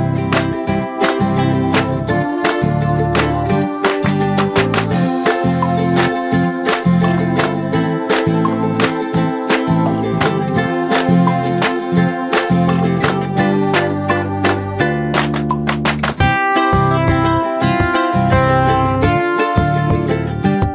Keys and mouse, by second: 2.2-6.2 drag, 3.4-4.7 typing, 6.4 click, 6.4 typing, 12.5 click, 16.4 click.